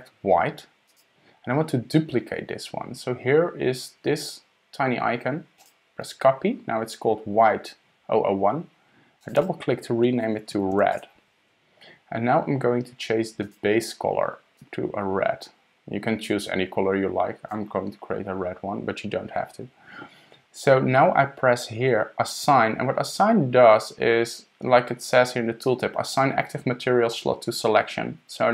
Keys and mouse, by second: 5.6 click, 9.2 click, 9.4-11.9 drag, 13.4 click.